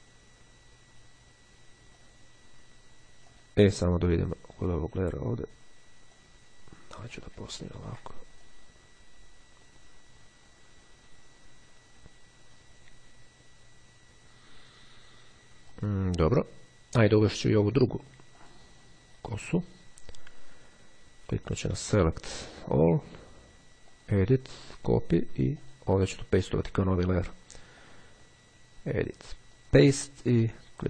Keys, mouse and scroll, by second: 1.6-2.7 drag, 3.3 click, 6.1-7.6 drag, 7.6-8.1 ctrl+scroll up 2, 8.6-16.3 drag, 18.4 click, 21.9 click, 22.8 click, 24.0 click, 24.8 click, 25.7 click, 27.9 click, 29.4 click.